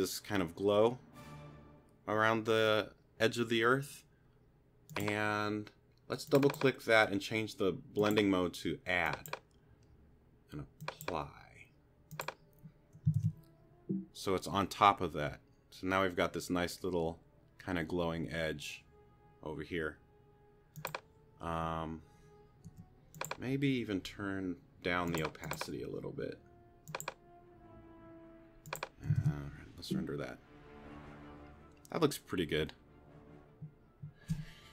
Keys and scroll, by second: 13.2 super+r, 22.7 q, 29.2 super+r.